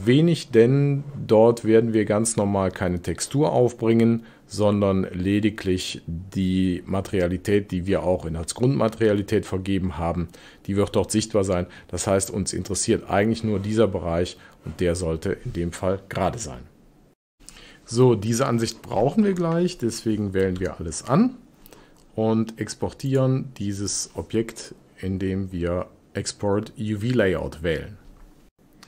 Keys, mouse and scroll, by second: 20.4 a, 23.1-26.2 drag.